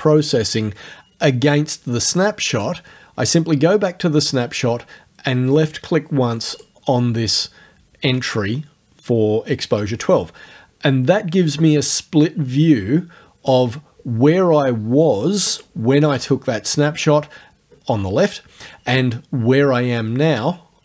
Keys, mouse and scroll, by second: 2.5 click, 6.6 click, 12.3-15.8 drag.